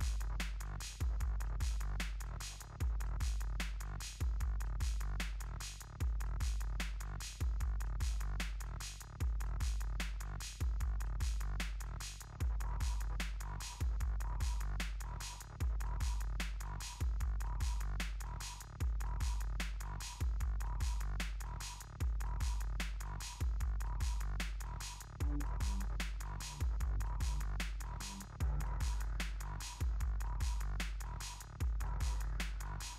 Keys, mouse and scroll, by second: 0.0-0.4 typing, 2.0 typing, 4.1 click, 12.9 click, 13.2 alt+scroll up 1, 13.7 scroll up 2, 14.3 alt+scroll down 1, 15.4 click, 16.3 scroll up 1, 18.0 click, 19.5-20.7 typing, 21.2 click, 27.3 alt+scroll up 1, 27.9 scroll up 1, 28.1 alt+scroll, 28.2 alt+scroll down 1, 31.3 click.